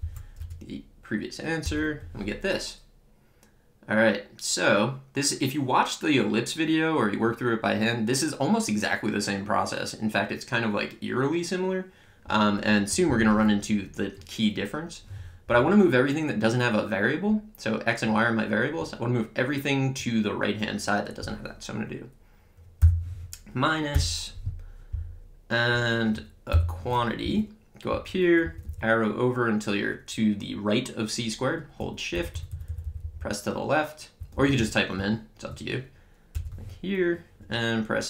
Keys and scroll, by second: 0.0 Up, 0.4 Return, 22.8 -, 24.0 Return, 26.5 (, 27.2 Up, 27.9 Right, 28.4 Left, 36.3 Return.